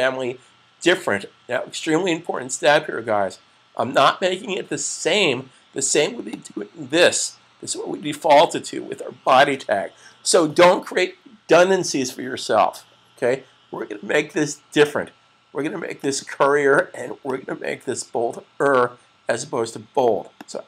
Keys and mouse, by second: 6.4 click, 15.7 click, 20.1 click.